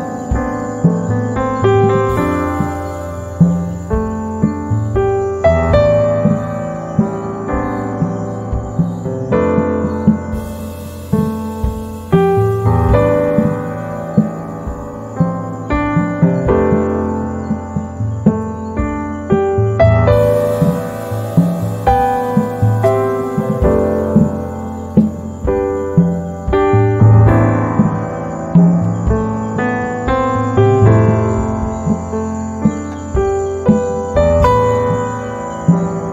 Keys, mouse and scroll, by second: 3.7-5.5 right drag, 5.5 z, 5.7 right click, 6.3 space, 6.9 click, 22.2 z, 22.4 click, 22.9 space, 25.3-31.9 drag.